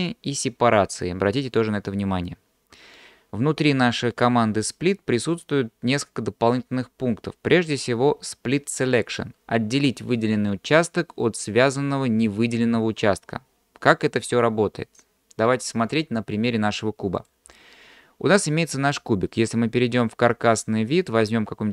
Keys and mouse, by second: 17.6-18.9 middle drag, 20.5 click.